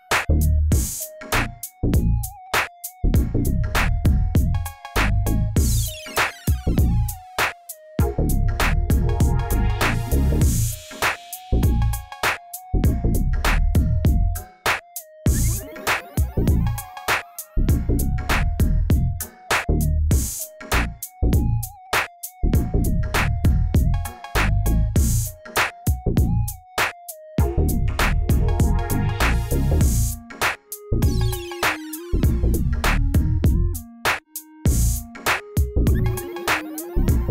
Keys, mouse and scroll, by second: 0.9 click, 2.1 click, 4.6 click, 6.1-6.5 drag, 7.2 click, 8.6-10.3 drag, 11.0 click, 11.3 click, 12.5 click, 12.9 click, 13.4 Tab, 13.5 click, 14.0 click, 14.5-16.6 drag, 17.5 click, 18.3 shift+middle click, 18.7-19.3 scroll down 8, 19.6 click, 20.0 click, 20.7 click, 21.3 click, 21.8 click, 22.4 shift+a, 24.4 drag, 25.2-26.6 drag, 27.1 scroll down 1, 29.5 click, 30.0 Tab, 30.7 a, 31.0-32.5 scroll down 15, 32.5 click, 33.4 shift+middle click, 33.8 scroll up 2, 34.5 click, 35.0 g.